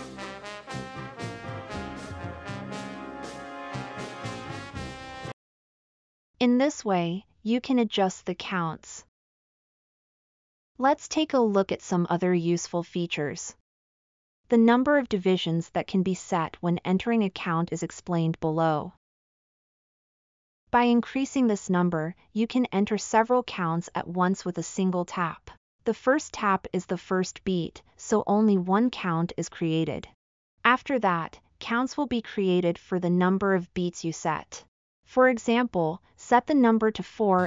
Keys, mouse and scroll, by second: 23.4-26.7 drag, 23.4-26.7 right drag.